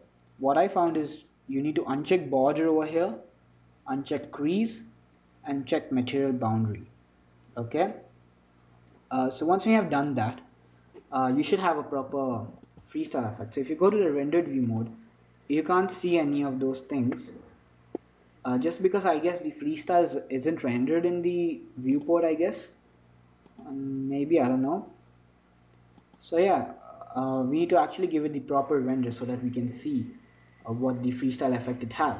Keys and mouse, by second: 2.6-4.5 drag, 6.3-8.2 drag, 8.2-10.3 middle drag, 10.3-12.1 drag, 12.1-14.2 middle drag, 12.6 ctrl+s, 14.2-15.2 drag, 17.5-19.9 middle drag, 22.3-31.2 drag.